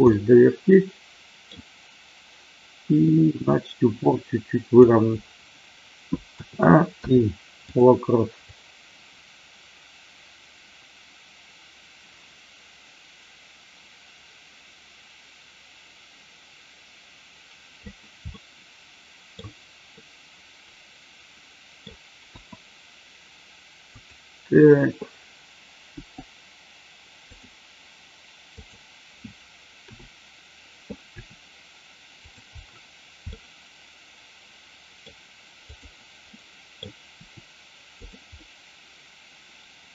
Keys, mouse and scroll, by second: 0.1-1.4 middle drag, 3.5-4.9 drag, 6.2 a, 6.9 i, 8.4-17.9 drag, 18.2-19.4 middle drag, 20.0-21.9 middle drag, 23.9 click, 25.9 g, 28.6 click, 31.1 r, 32.1 click, 33.2-35.0 middle drag, 35.7 click, 36.2 middle click, 37.1 r, 38.0 click, 38.2-39.9 middle drag.